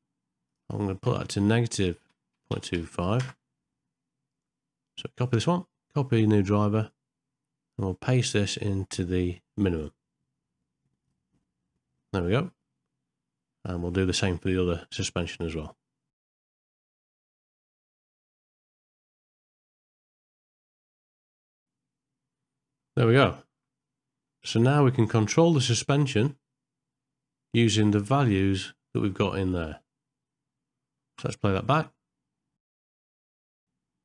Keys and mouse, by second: 0.5-3.3 drag, 5.2-6.9 right drag, 9.7-11.2 right drag, 15.3 click, 16.3 right click, 16.6 right click, 16.9 right click, 17.2 ctrl+shift+middle click, 17.4 ctrl+middle click, 18.1 right click, 18.4 right click, 18.8 right click, 19.1 right click, 19.3 right click, 19.8 shift+middle click, 20.4 right click, 20.7 right click, 21.2 right click, 21.5 right click, 22.8 ctrl+middle click, 23.4 shift+middle click, 23.8 middle click, 24.6 ctrl+middle click, 25.1 shift+middle click, 25.9 middle click, 28.2 click, 31.3 space, 32.7 shift+middle click, 32.9 middle click.